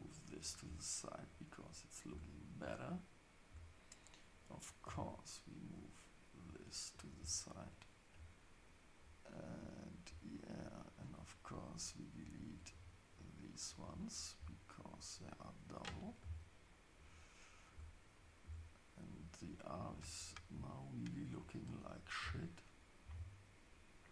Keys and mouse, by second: 2.1 Tab, 4.5 click, 4.8 g, 11.1 click, 12.8 shift+click, 13.5 shift+click, 15.3 shift+click, 16.2 x, 17.7 Tab, 24.0 click.